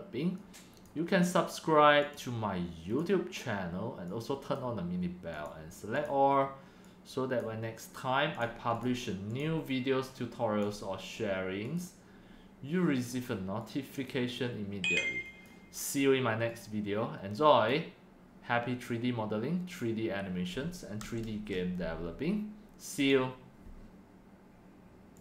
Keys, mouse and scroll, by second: 1.6-2.9 drag, 4.5-5.2 right drag, 5.2-7.0 drag, 8.9 click, 9.4 click, 10.6 right click, 10.9-12.4 drag, 14.0 click, 15.3-17.7 drag, 17.7-21.0 right drag, 21.5-23.1 scroll down 1, 23.1 right click, 24.2 right click, 24.2-25.2 drag.